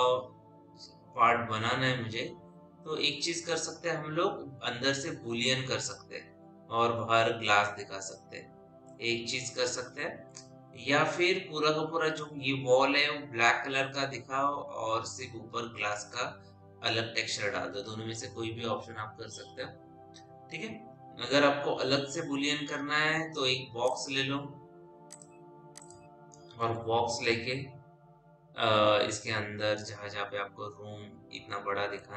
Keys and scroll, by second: 27.6 t.